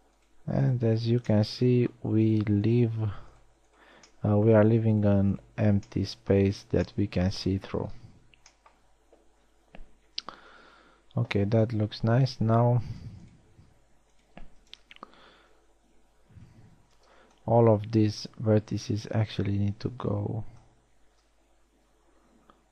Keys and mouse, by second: 1.7 f, 4.8 middle click, 6.3 f, 10.1 KP_1, 10.6 z, 15.4 z, 16.9 z, 17.3 a, 17.8 b.